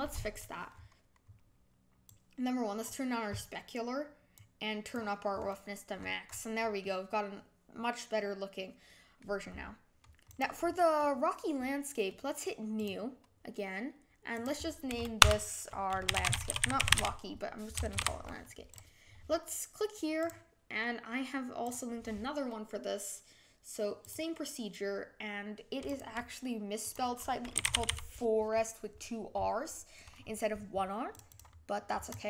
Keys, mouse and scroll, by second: 0.1 scroll down 1, 0.7-2.0 scroll down 6, 2.0-5.3 drag, 5.3 scroll down 6, 5.9-6.8 scroll down 12, 6.8-10.2 middle drag, 10.2 click, 10.6-10.9 scroll down 5, 10.9-12.7 middle drag, 12.7-17.5 drag, 17.9 BackSpace, 21.7-23.2 drag, 24.0-27.1 drag.